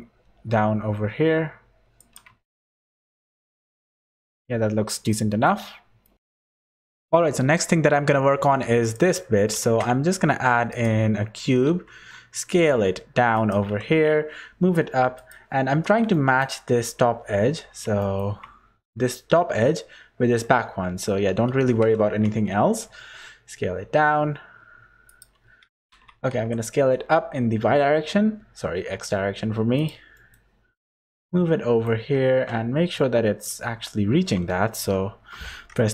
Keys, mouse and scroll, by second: 2.3 Tab, 2.7 click, 3.5 middle click, 3.9 z, 4.3 middle click, 5.1 middle click, 5.7-6.2 scroll down 3, 6.0 middle click, 6.1 ctrl+alt+r, 6.1 shift+middle click, 6.1 scroll up 9, 8.8 shift+right click, 9.5 shift+a, 11.4 Tab, 11.7 s, 13.6 g, 15.7 scroll up 4, 16.1 shift+middle click, 17.7 scroll up 3, 18.0 shift+middle click, 28.0 s, 30.1 shift+middle click, 32.1 shift+middle click, 32.9 middle click, 33.7-35.9 scroll up 7, 34.7 3.